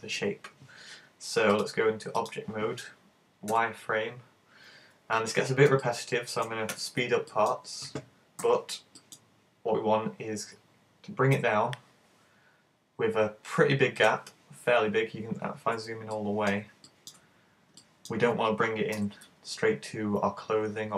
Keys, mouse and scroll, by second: 1.6 click, 4.7-5.2 scroll up 5, 5.4 shift+middle click, 5.9 shift+middle click, 6.7 a, 7.4 shift+middle click, 8.4 b, 14.0 click, 15.3-15.8 scroll up 2, 15.8-16.2 scroll down 1, 16.2 shift+middle click, 16.9 shift+middle click, 17.3-17.8 scroll up 3, 17.8 shift+middle click, 19.0 g.